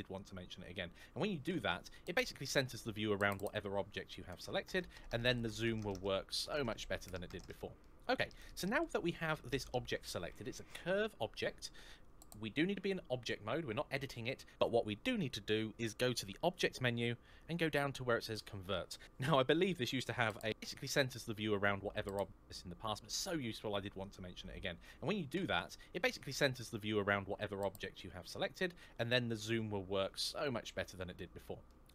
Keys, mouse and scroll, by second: 3.9-4.6 scroll up 1, 4.6-5.2 scroll down 1, 5.2 scroll up 1, 5.6 scroll down 1, 5.8-6.2 scroll up 1, 6.2 scroll down 1, 6.4 scroll up 1, 7.6 middle click, 16.3 click, 27.8-28.4 scroll up 1, 28.4-29.1 scroll down 1, 29.1 scroll up 1, 29.4 scroll down 1, 29.7 scroll up 1, 30.0 scroll down 1, 30.3-30.6 scroll up 1, 31.5 middle click.